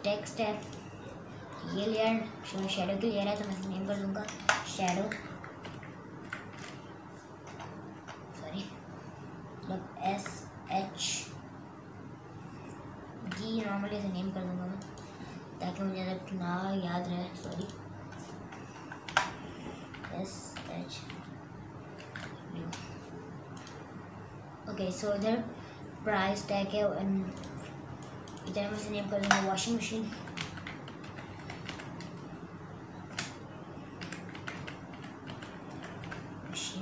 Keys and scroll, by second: 4.3-7.9 typing, 10.1-11.2 typing, 13.3 d, 19.2-21.1 typing, 22.1 w, 29.3-36.5 typing.